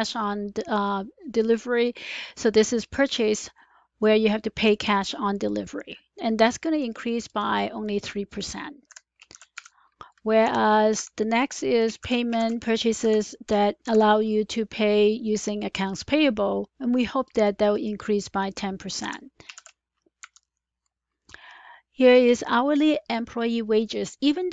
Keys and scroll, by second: 8.8 F4, 9.2 ), 9.4 Return, 10.3 =, 10.9 Left, 12.0-13.7 typing, 16.8 typing, 18.9 F4, 19.5-20.3 typing.